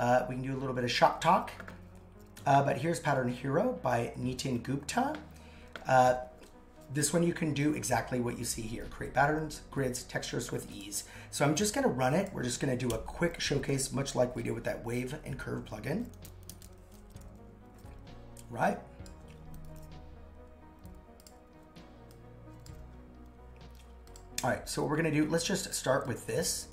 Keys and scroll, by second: 12.9 super+/.